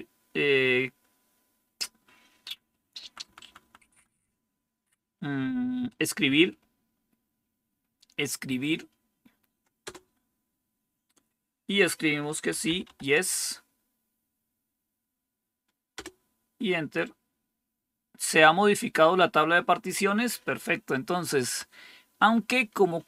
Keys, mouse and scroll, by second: 2.9 Down, 3.1 Down, 3.3 Down, 3.5 Down, 3.7 Down, 6.0 Tab, 6.2 Right, 6.5 Right, 6.7 Right, 9.7 Return, 12.2-13.3 typing, 15.9 Return, 21.3 Up.